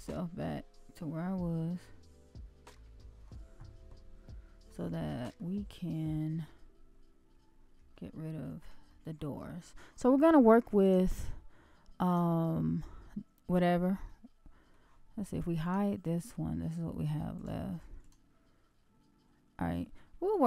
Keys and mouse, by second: 1.2-2.7 middle drag, 2.9 shift+middle click, 4.2-4.6 middle drag, 4.9-5.3 shift+middle drag, 5.7 middle click, 7.9-8.6 shift+middle drag, 8.8 middle click, 10.8 click, 14.0-14.7 middle drag, 15.6 shift+click, 17.4 shift+click, 18.0-20.0 shift+drag.